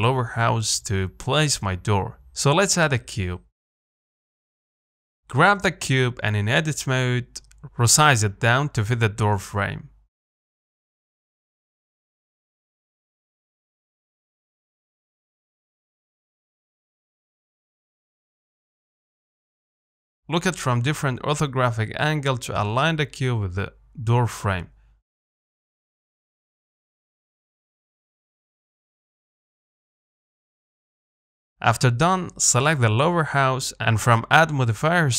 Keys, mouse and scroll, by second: 0.0 middle click, 1.0 shift+s, 1.6 click, 3.4 shift+a, 3.8 s, 5.7 KP_1, 6.4 Tab, 7.4 s, 8.9 g, 9.8-10.1 scroll up 6, 10.1 shift+middle click, 10.5 s, 13.9 g, 15.5 s, 18.0 g, 20.7 click, 21.0 scroll down 1, 21.3 shift+middle click, 22.1 g, 24.5 middle click, 24.9 z, 26.0 KP_7, 26.6 Tab, 27.0 z, 28.2 g, 30.9 Tab, 31.5 z, 31.8 Tab, 32.1 middle click, 32.6 click, 34.0-34.6 scroll down 4.